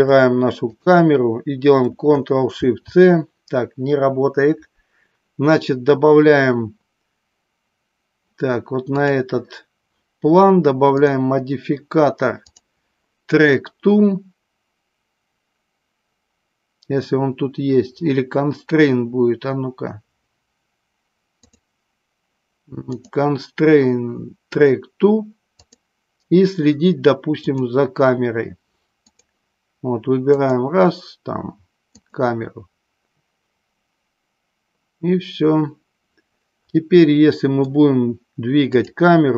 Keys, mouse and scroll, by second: 0.8 shift+click, 2.6 ctrl+shift+c, 8.9 click, 10.9 click, 12.5-18.2 drag, 21.3 click, 23.0-26.1 drag, 27.6-29.1 drag, 30.3 click, 37.2 middle click, 38.8 click.